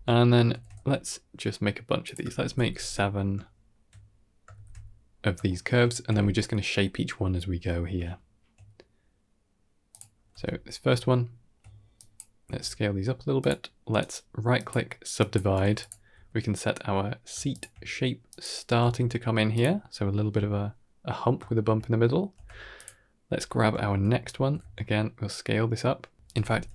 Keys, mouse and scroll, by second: 0.0 shift+middle click, 0.4 shift+d, 2.1 shift+r, 2.3 shift+r, 2.5 shift+r, 2.6 shift+r, 2.9-3.3 scroll down 3, 3.3 shift+middle click, 4.4 shift+r, 4.9-5.3 scroll up 3, 5.3 shift+middle click, 8.0 shift+middle click, 9.8 click, 10.2 Tab, 10.6 scroll up 2, 10.8 shift+middle click, 11.8 click, 12.3 s, 13.8 right click, 15.0 click, 15.5 g, 16.0 r, 16.5 s, 17.4 shift+click, 18.1 click, 18.7 s, 21.3 shift+middle click, 22.2 Tab, 22.6 click, 23.2 Tab, 23.6 shift+middle click, 24.2 a, 24.4 s, 26.2 Tab, 26.4 x.